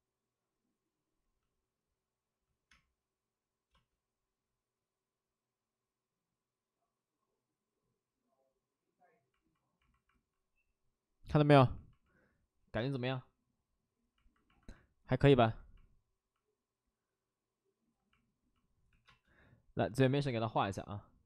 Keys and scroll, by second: 2.5 space, 2.7 space, 3.7 space, 12.7 space, 19.0 5, 19.0 space.